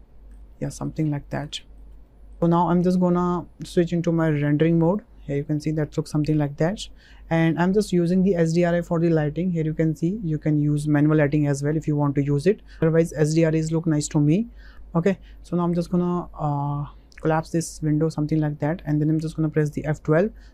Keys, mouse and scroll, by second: 0.5 shift+middle click, 1.1 ctrl+middle click, 1.6 shift+middle click, 2.0 middle click, 8.7 click, 17.2 click, 17.3 middle click, 20.3 F11.